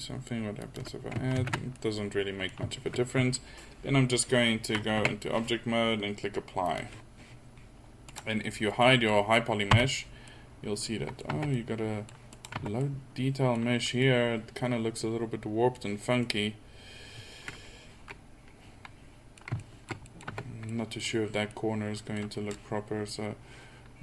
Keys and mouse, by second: 1.4 ctrl+z, 5.0 Tab, 9.8 h, 11.3 Tab, 12.6 Tab, 14.1-15.5 middle drag, 16.3 middle click, 17.3 middle click, 18.0 middle click, 18.7 middle click, 20.3 Tab.